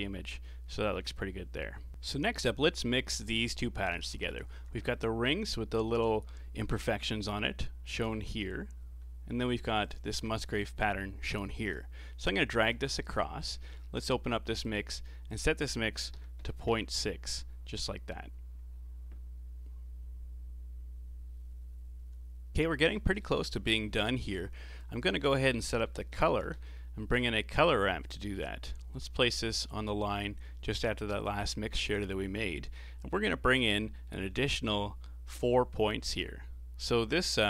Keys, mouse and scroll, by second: 0.7-1.5 scroll down 4, 2.2 middle click, 2.7 scroll down 4, 3.0-4.2 middle drag, 4.2 ctrl+shift+click, 9.8 ctrl+shift+click, 11.7-13.3 ctrl+shift+right drag, 13.3-14.6 scroll up 15, 14.6 click, 15.3-21.3 drag, 22.7-24.6 middle drag, 24.6 shift+a, 26.4 r, 28.9-29.3 scroll up 4, 29.3 middle click, 29.9 scroll up 2, 30.1-33.5 middle drag, 33.5-33.8 scroll up 3, 33.8-34.5 middle drag, 34.5-35.0 scroll up 2, 35.0-37.4 middle drag.